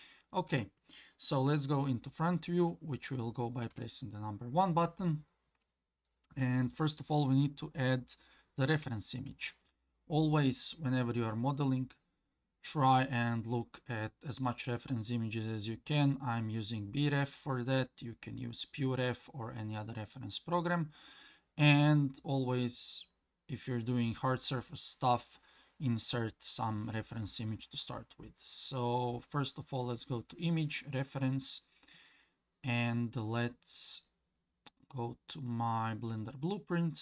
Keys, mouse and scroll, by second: 0.0-0.5 middle drag, 3.7 KP_1, 9.3 shift+a.